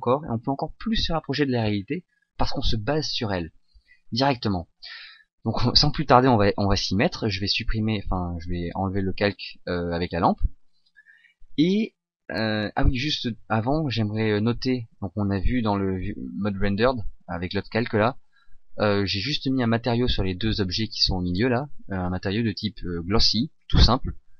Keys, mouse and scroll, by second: 6.3 shift+z, 9.3 click, 11.6 middle click, 14.1 right click, 15.4 shift+z, 18.4 shift+click.